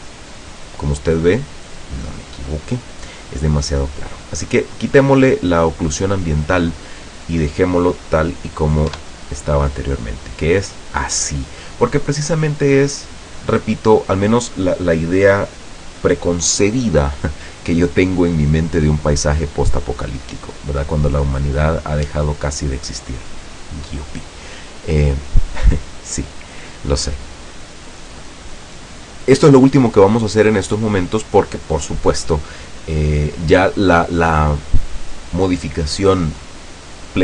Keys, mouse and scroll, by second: 5.0 click, 9.1 F12.